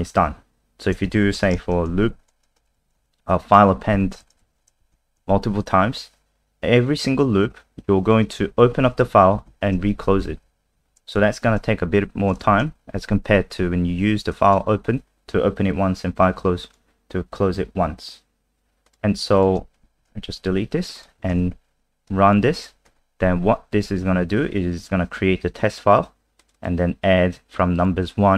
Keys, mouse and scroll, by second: 1.1 Up, 1.3 Return, 1.4-3.2 typing, 3.7 Down, 3.9 Down, 4.2 End, 4.4 shift+Home, 8.4 Down, 9.5 Down, 9.9 shift+Up, 10.0 shift+Up, 10.2 shift+Up, 10.4 shift+Up, 10.7 shift+Up, 11.5 Delete, 11.5 Delete, 12.4 Return, 13.0 ctrl+s, 14.3 click, 20.0 Home, 20.4 Delete, 21.0 click, 21.3 ctrl+s, 22.1 click, 22.9 F5, 26.4 click, 26.5 click, 27.5 click.